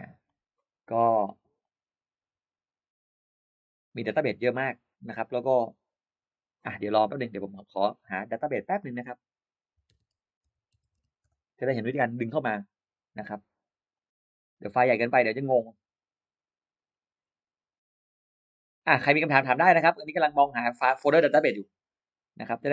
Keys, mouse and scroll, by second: 1.5-6.3 drag, 7.5 click, 8.4 click, 9.8-11.3 typing, 13.8-22.7 drag.